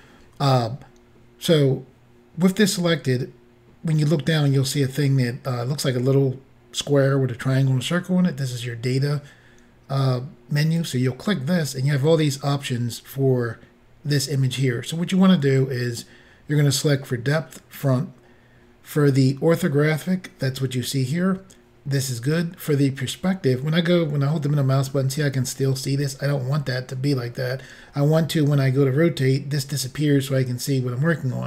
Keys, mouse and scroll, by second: 10.8 click, 17.8 click, 23.7 middle click.